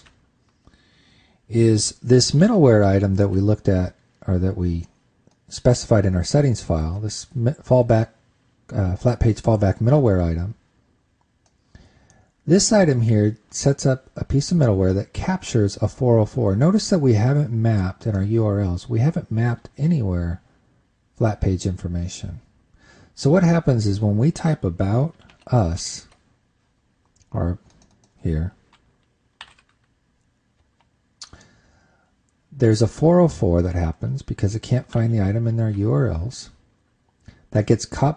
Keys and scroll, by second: 3.0 super+Tab, 26.0 super+Tab, 35.5 super+Tab.